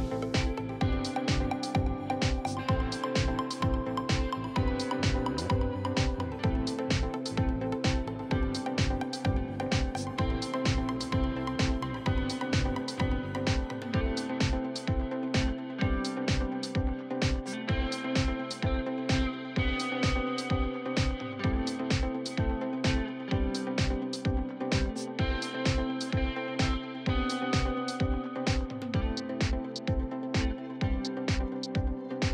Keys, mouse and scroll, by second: 0.4 alt+click, 1.1 middle click, 1.4 click, 2.2 middle click, 3.1 middle click, 3.3 click, 4.7 shift+click, 4.9 middle click, 5.2 shift+click, 5.6 middle click, 8.3 click, 9.1 s, 10.0 click, 10.8-11.8 drag, 12.6-13.7 drag, 13.7 scroll up 3, 13.8 shift+middle click, 14.3 click, 16.2 shift+middle click, 16.9 click, 17.3 KP_3, 17.9 shift+middle click, 18.5-21.5 drag, 21.5 scroll down 4, 21.6 shift+middle click, 21.9 middle click, 22.2-22.6 scroll up 2, 22.6 alt+click, 22.8 middle click, 23.0 click, 23.4 middle click, 24.2-24.9 scroll up 1, 24.9 ctrl+r, 26.0 middle click, 26.4-27.6 drag, 28.2-29.2 alt+drag, 29.2 scroll down 2, 29.3 middle click, 29.9 KP_3, 30.6 scroll up 2, 30.8-32.0 shift+middle drag, 32.0-32.3 scroll down 4.